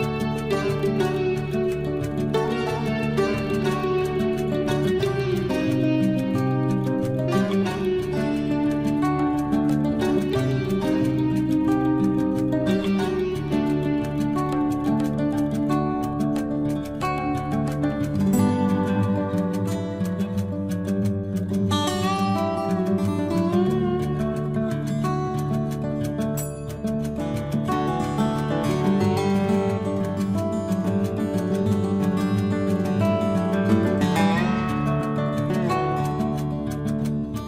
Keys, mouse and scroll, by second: 4.9 t, 5.3-5.7 scroll up 1, 8.6 click, 10.0-10.8 typing, 14.5 6, 15.2 shift+', 15.5 Return, 16.8-17.3 scroll down 1, 19.6 scroll up 1, 21.9 click, 22.2 scroll up 1, 23.2 space, 23.5 scroll down 1, 24.2 click, 24.2 click, 25.3 Delete, 25.9 scroll down 1, 26.4 click, 26.8 Delete, 27.5-28.4 scroll down 1, 28.4-29.0 scroll up 1.